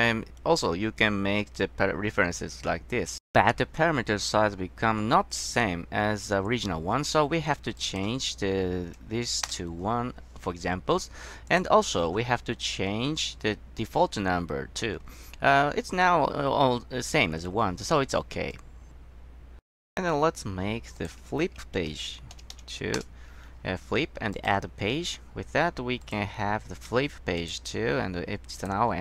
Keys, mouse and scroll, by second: 7.9 drag, 9.0 KP_1, 9.6 Return, 11.6 click, 12.6-13.6 scroll down 1, 18.6 click, 23.1 Return, 24.5 click, 26.2 click, 27.5 click, 28.7 click.